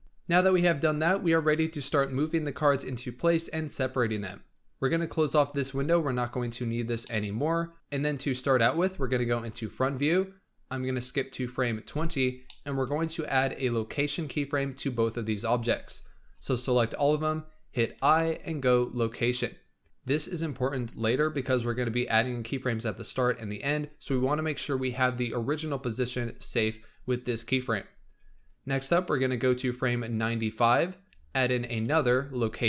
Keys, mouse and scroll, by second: 0.0-2.4 shift+middle drag, 2.6-5.3 scroll down 2, 5.3-6.9 drag, 6.9-7.7 middle drag, 7.7 scroll up 2, 9.3 KP_1, 11.2-12.4 drag, 12.4-15.5 shift+middle drag, 15.5 alt+a, 16.1 b, 17.9 i, 28.4-30.9 drag, 30.9-31.7 scroll up 2, 31.7 i.